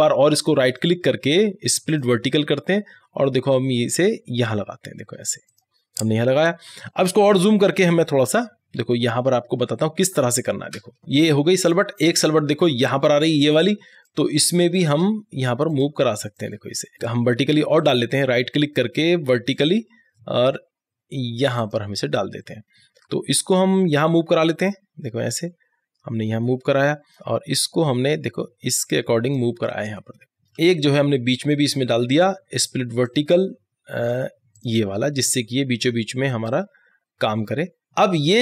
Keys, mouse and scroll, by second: 0.7 click, 0.7 right click, 2.0 click, 5.5 click, 5.6 click, 8.4 ctrl+=, 10.8-12.8 typing, 11.0 click, 11.1 click, 11.6 click, 12.1 click, 12.7 click, 14.1 click, 14.5 space, 15.4-17.9 drag, 17.9 right click, 19.6 click, 22.7 scroll down 1, 23.3-25.4 drag, 25.4 scroll up 1, 25.9-29.3 drag, 29.3-29.9 scroll down 1, 30.1 scroll down 1, 30.2 middle click, 31.3 right click, 32.2-37.4 drag.